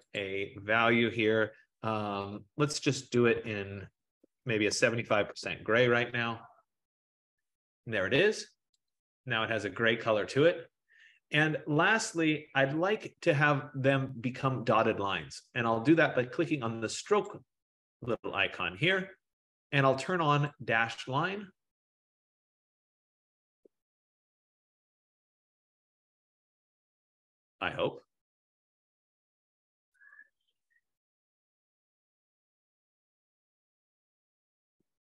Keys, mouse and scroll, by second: 0.4 click, 3.4-5.2 typing, 5.4 Tab, 9.0 click, 9.9-14.0 drag, 17.3 click, 20.6 click, 23.9-25.8 drag.